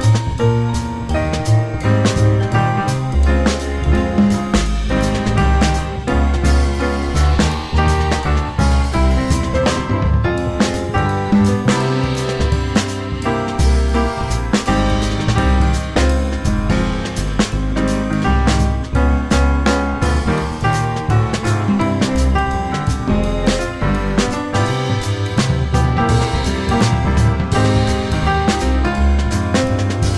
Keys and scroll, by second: 0.2 1, 0.4 ctrl+a, 1.1 F3, 2.9 s, 4.1 r, 5.1 w, 6.7 1, 9.5 F3, 11.2 F3, 11.3 1, 11.5 F4, 12.0 F4, 13.2 1, 13.4 F3, 13.6 r, 18.6 w, 18.8 F3, 19.4 F3, 20.8 F3, 22.2 w, 26.2 r, 29.9 F3.